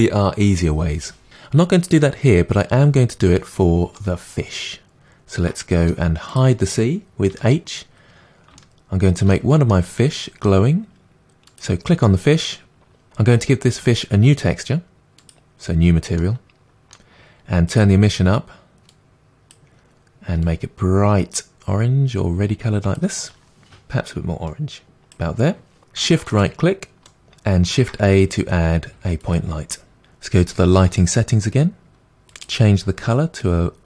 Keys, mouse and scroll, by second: 2.7-4.0 scroll down 7, 4.0-6.4 shift+middle drag, 6.4 click, 7.4 h, 8.0 scroll up 4, 8.6-11.6 shift+middle drag, 11.6 click, 15.3-18.9 drag, 24.2 click, 27.1 shift+right click, 29.4 shift+a, 33.4 click.